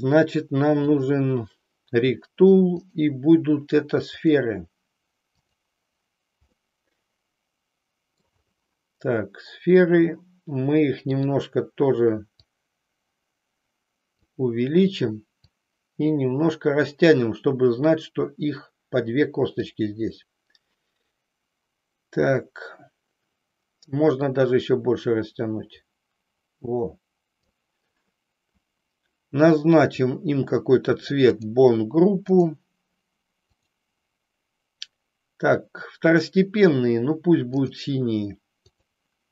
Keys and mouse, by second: 0.8 click, 2.8-4.4 drag, 5.4 click, 6.6-8.3 middle drag, 12.6-14.4 drag, 15.8-19.8 drag, 24.7-27.6 drag, 29.8 click, 32.3 click, 33.7-37.8 drag, 38.8 click.